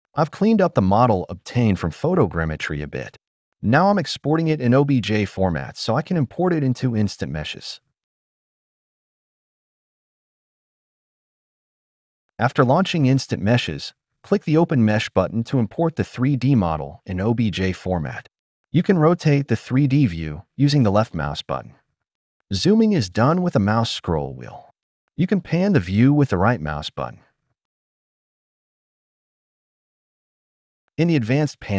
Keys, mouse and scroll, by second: 5.5-7.8 drag.